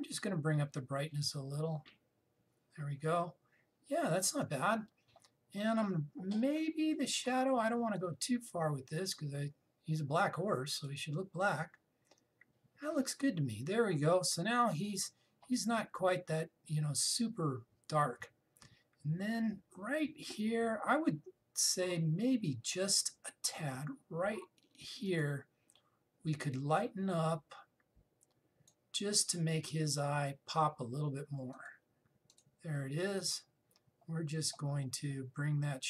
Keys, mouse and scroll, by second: 0.3-7.6 drag, 8.6-14.1 drag, 22.9-24.1 scroll up 1, 24.1-30.4 drag, 30.4 scroll down 1, 32.2 click, 33.9-35.8 scroll down 1.